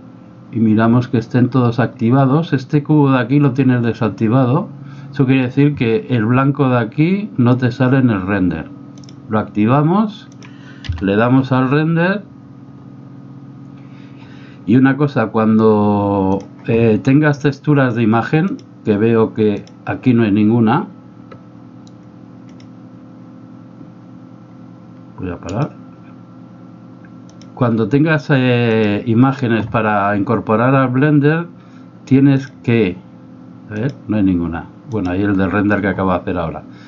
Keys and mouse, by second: 9.1-11.1 drag, 11.1 F12, 27.5 click, 28.8-32.5 drag, 33.8-35.1 drag.